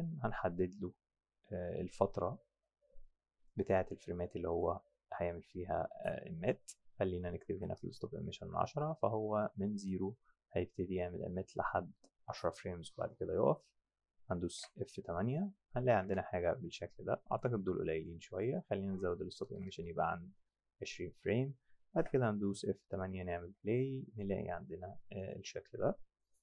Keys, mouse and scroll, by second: 4.6 click, 7.4 KP_1, 7.5 KP_0, 7.8 KP_Enter, 14.6 F6, 16.1 F6, 17.3 click, 18.3 click, 19.4 KP_1, 19.5 KP_0, 19.7 KP_Enter, 22.0 F8, 23.5 F7.